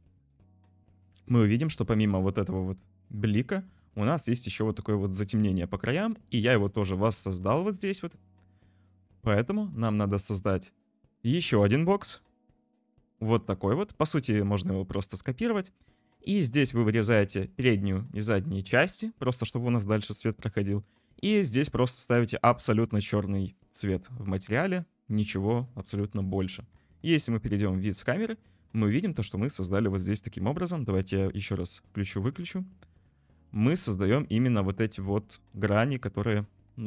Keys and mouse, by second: 1.5 drag, 3.6 click, 5.0 click, 6.5 click, 7.3 click, 9.6 click, 11.2 click, 11.8 click, 13.4 shift+middle click, 13.8 g, 15.1 middle click, 15.3 click, 15.7 middle click, 16.0 middle click, 16.5 middle click, 17.6 middle click, 17.7 click, 18.3 middle click, 20.5 click, 21.9 click, 23.5 click, 24.4 click, 24.7 click, 26.1 `, 26.8 `, 28.1 click, 28.5 shift+click, 32.3 click, 33.0 click, 34.1 click, 35.6 click.